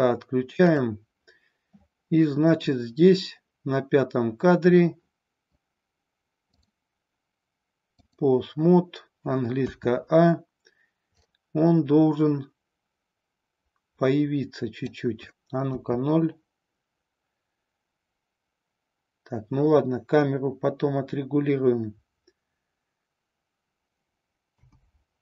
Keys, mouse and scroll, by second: 0.7 click, 6.5-8.1 drag, 9.6 a, 11.1-15.0 drag, 15.6 KP_0, 24.5 KP_0.